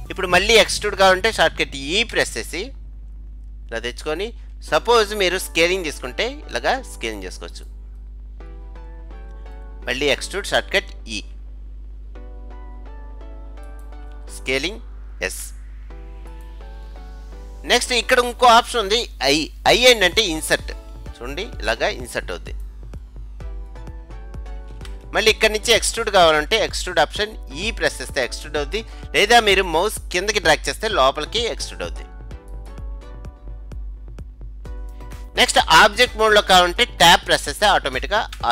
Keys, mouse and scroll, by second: 2.2 e, 6.0 s, 8.0-10.0 middle drag, 10.0-11.2 scroll down 1, 11.2-13.3 scroll down 1, 11.2 e, 15.4 s, 23.1-25.8 middle drag, 27.6 e, 33.2-35.1 middle drag, 38.4 Tab.